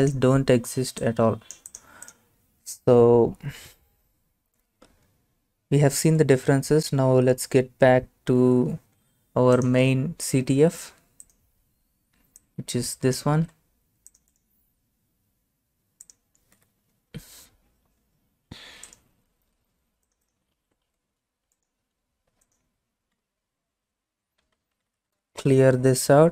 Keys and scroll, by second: 13.4 ctrl+c, 16.6 Return, 20.6 ctrl+c, 21.1 alt+Tab, 23.2 Return, 24.3-26.3 typing.